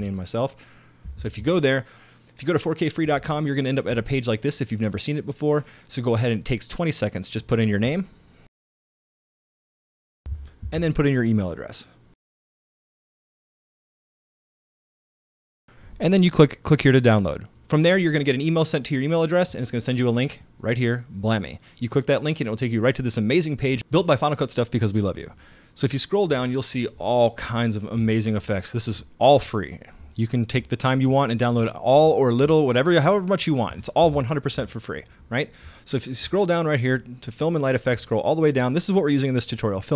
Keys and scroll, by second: 1.1 super+Tab, 8.4-10.7 typing, 12.2-15.8 typing.